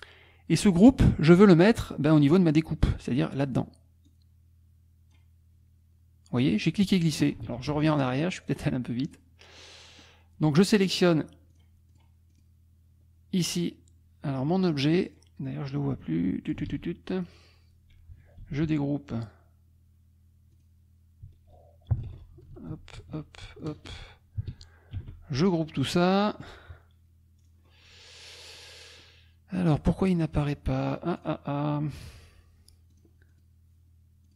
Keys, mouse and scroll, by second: 4.1-5.3 drag, 7.2 ctrl+click, 7.6 ctrl+z, 8.4 click, 9.0 click, 9.6 click, 10.2-10.9 scroll down 2, 10.9-11.2 scroll up 2, 11.5 click, 12.0 click, 12.3 click, 15.1 click, 15.5-16.7 drag, 16.7 ctrl+z, 18.4 ctrl+g, 20.6 click, 22.5 ctrl+shift+g, 24.9 ctrl+g, 27.4 scroll down 2, 27.6 scroll up 2, 28.5 click, 30.3 click, 31.2 click, 33.0 click, 33.4 click.